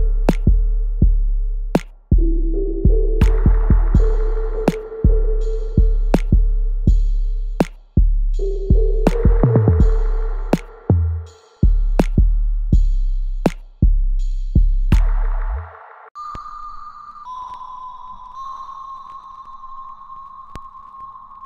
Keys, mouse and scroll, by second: 0.0 alt+middle click, 1.1 shift+click, 2.1 alt+click, 3.1 alt+click, 6.9-8.7 alt+drag, 9.5-17.1 alt+drag, 17.1 alt+middle click, 17.6 alt+click, 18.1 alt+middle click, 18.8 alt+click, 19.4 alt+right click, 19.9-21.4 alt+drag.